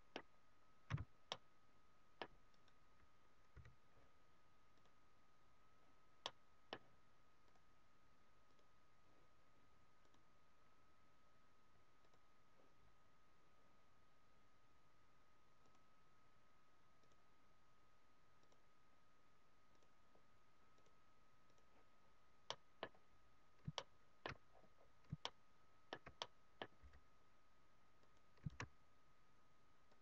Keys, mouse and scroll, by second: 0.0-1.0 scroll down 3, 0.8 z, 1.4 middle click, 1.4 scroll down 1, 2.7 right click, 3.5 h, 4.7 click, 6.3 middle click, 8.6 click, 10.1 click, 15.6 click, 22.4 middle click, 23.6 shift+middle click, 24.5-24.9 scroll up 5, 25.1 shift+middle click, 26.1 middle click, 26.8 f, 28.2 click, 28.5 shift+f.